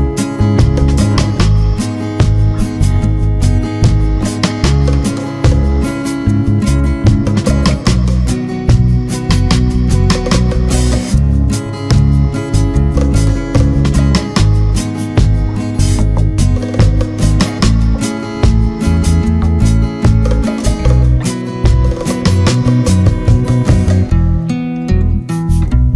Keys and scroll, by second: 0.8 ctrl+d, 3.2 Up.